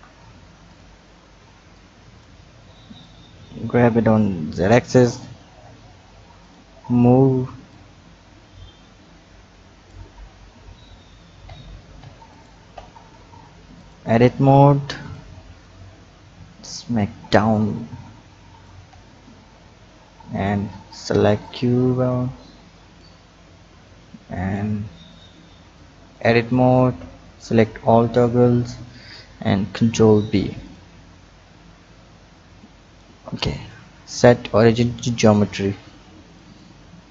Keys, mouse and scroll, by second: 0.6 click, 1.6 b, 3.0-5.2 drag, 5.2 Tab, 6.4 click, 7.7-10.2 drag, 10.2-11.4 scroll up 3, 11.4 Tab, 12.0 Tab, 12.3 click, 12.7 Tab, 13.2-13.8 scroll down 2, 13.8 click, 14.8 b, 16.9-18.9 drag, 18.9 Tab, 20.3 click, 21.4-23.9 drag, 25.1 click, 26.3 Tab, 27.0 a, 27.9 a, 29.5 ctrl+b, 30.8 Tab, 31.6 click, 33.6-37.1 drag.